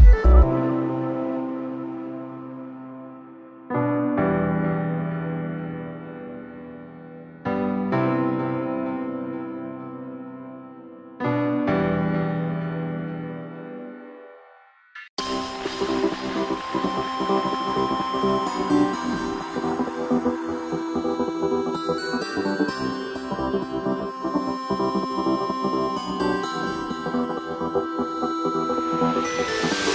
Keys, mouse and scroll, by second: 1.0 right click, 1.9 shift+right click, 2.7 g, 4.2 KP_1, 5.9 click, 7.1 g, 9.2 right click, 10.1 g, 11.3 s, 13.2 g, 16.3 right click, 16.7-18.2 middle drag, 18.2-18.5 scroll down 1, 18.5 KP_3, 18.9 right click, 19.7 g, 21.5 s, 24.1 s, 27.2 g, 29.4 right click, 29.8-29.9 middle drag.